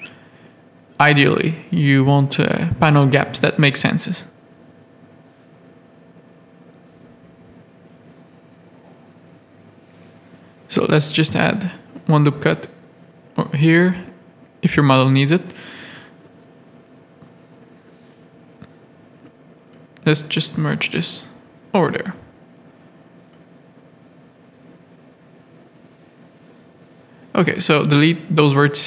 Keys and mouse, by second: 0.5 Tab, 1.5 middle click, 2.4 z, 2.6 middle click, 3.2 shift+middle click, 4.0 middle click, 4.9 middle click, 5.5 z, 6.1 z, 7.1 click, 7.4 middle click, 8.1 Tab, 8.5 z, 8.6 a, 8.8 middle click, 9.9 ctrl+r, 10.8 Tab, 11.0 middle click, 11.4 z, 11.8 z, 12.3 alt+a, 14.5 Tab, 14.8 middle click, 16.2 z, 16.3 a, 17.0 click, 17.8 z, 19.2 g, 20.2 Tab, 20.9 z, 21.6 alt+a, 22.0-23.9 middle drag, 24.1 click, 25.0 middle click, 25.5 middle click, 25.8 Tab, 26.4 middle click, 26.6 z, 26.8 a, 27.9 z, 28.3 g.